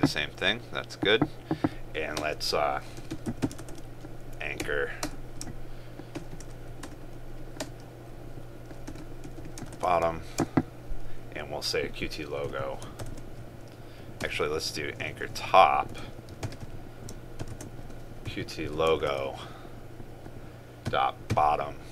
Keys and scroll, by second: 3.7 ctrl+space, 9.8 ctrl+space, 13.1 ctrl+space, 19.1 ctrl+space.